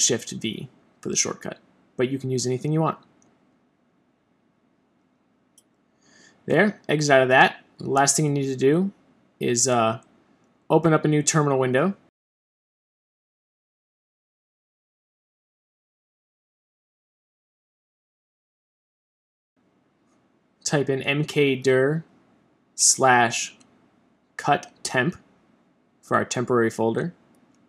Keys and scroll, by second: 0.6 shift+super+v, 13.4 Return.